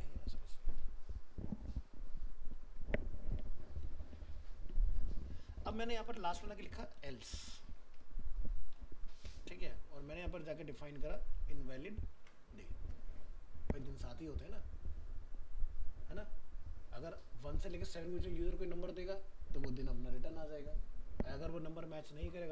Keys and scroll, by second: 12.2 ctrl+s.